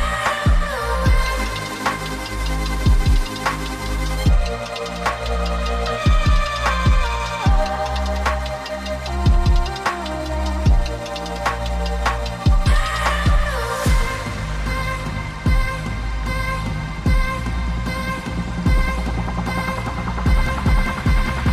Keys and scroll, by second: 4.7 typing, 6.1 typing, 10.1-10.8 typing.